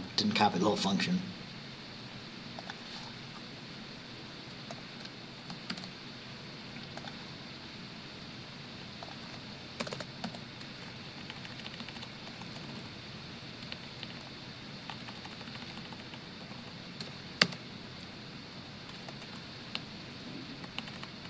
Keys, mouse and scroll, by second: 2.7 click, 3.8-4.6 scroll down 2, 4.8 shift+click, 5.8 ctrl+c, 7.1 click, 9.1 click, 9.9 Return, 10.4 ctrl+v, 11.3 Down, 12.3 Up, 13.8 shift+Down, 16.5 shift+Up, 17.5 shift+Tab, 19.2 Up, 19.3 Right, 19.9 Down.